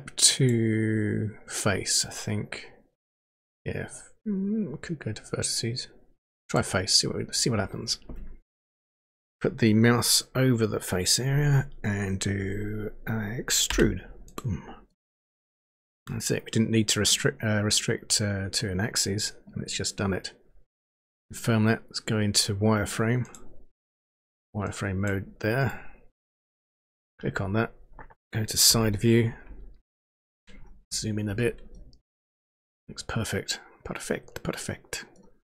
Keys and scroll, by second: 13.9 e, 28.7 Page_Down.